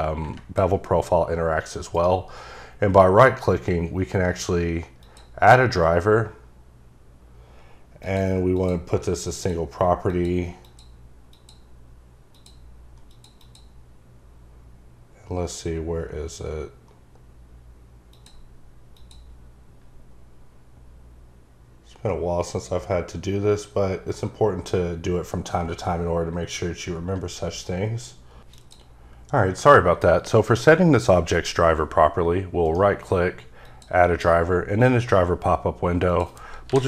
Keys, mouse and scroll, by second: 1.9 right click, 4.9 click, 7.9 click, 8.5 click, 9.3 click, 10.0 click, 10.6 click, 11.2 click, 12.3 click, 13.0 click, 13.3 double click, 18.0 click, 18.9 click, 33.6 click, 36.1 click, 36.6 typing.